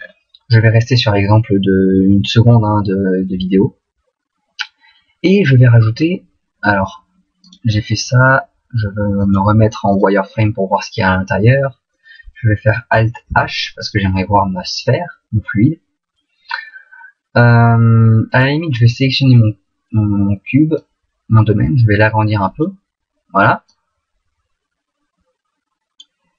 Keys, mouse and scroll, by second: 11.5 click, 11.5 middle click, 13.3 alt+h, 14.2 middle click, 18.4 right click, 20.8 click, 23.7 click.